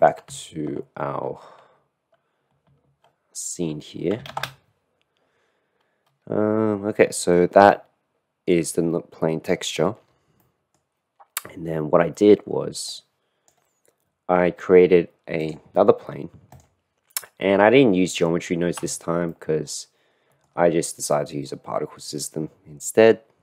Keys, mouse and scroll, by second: 0.0 ctrl+space, 0.2 ctrl+space, 4.7 ctrl+space, 7.7 middle click, 8.4 middle click, 8.8 middle click, 9.6 middle click, 10.4-10.8 middle drag, 10.8 click, 13.0-14.2 middle drag, 14.7 middle drag, 15.5 click, 16.9 drag, 19.4-20.6 shift+middle drag, 20.8-21.1 middle drag.